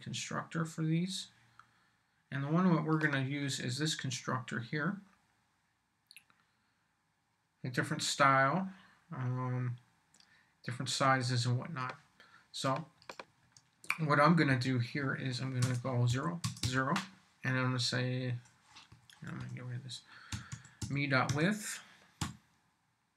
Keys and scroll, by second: 14.5 Left, 15.4-17.1 typing, 18.9 Right, 19.4-23.1 typing.